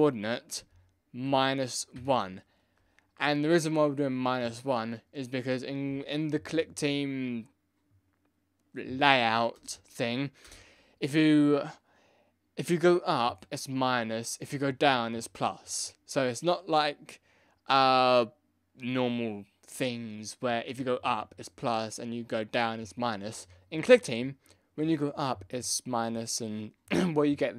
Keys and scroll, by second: 2.1 1, 10.4 Return.